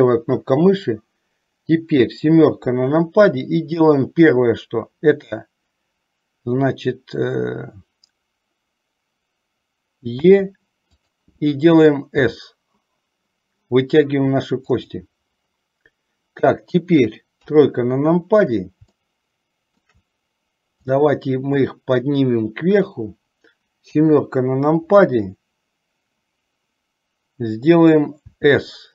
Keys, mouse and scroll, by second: 2.1 KP_7, 10.4 e, 12.4 s, 17.5 KP_3, 19.1 shift+middle click, 20.9-23.0 drag, 24.0 KP_7, 28.4 s.